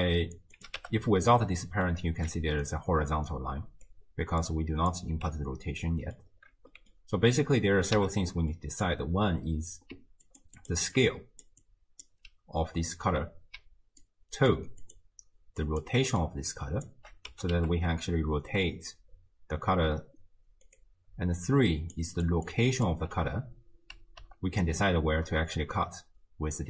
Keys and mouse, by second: 0.6 click, 0.8 m, 1.9 middle click, 2.4-5.2 d, 2.6-3.9 drag, 4.4 click, 5.9-6.2 drag, 6.7 drag, 8.0 m, 8.6-8.9 drag, 9.9-12.2 typing, 10.3 click, 10.6 click, 10.9 click, 11.7 click, 13.6-17.1 d, 14.0 click, 14.9 click, 15.6 click, 16.2 click, 17.3 r, 21.2-23.1 typing, 21.4 click, 22.2 click, 22.5 click, 24.2 g.